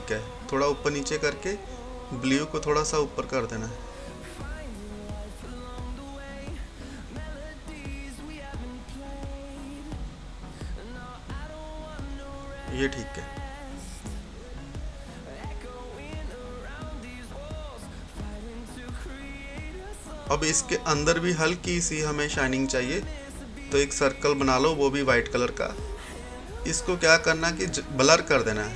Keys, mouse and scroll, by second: 4.3-7.5 drag, 7.5-15.3 drag, 15.4-18.3 drag, 19.4-20.0 scroll down 1, 20.0 scroll up 1, 20.7-21.6 scroll down 1, 21.6-25.3 drag, 28.5 click.